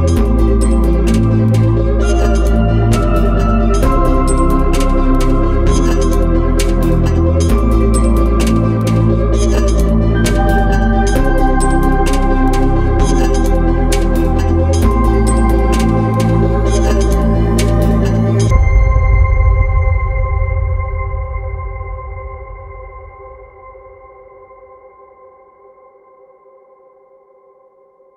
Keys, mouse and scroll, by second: 2.5 click, 6.7 r, 7.9 click, 11.5 r, 12.7 click, 14.7 r, 16.7 click, 18.1 r, 19.3 click, 26.3 click.